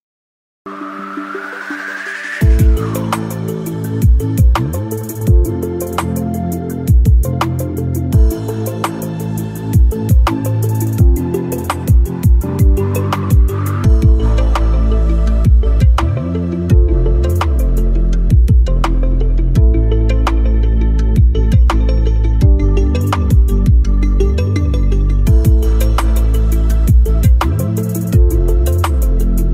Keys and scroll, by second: 5.9 shift+Home, 6.7 shift+7, 7.7 a, 7.9 l, 24.0 Escape, 28.4 shift+Home, 29.4-29.5 typing.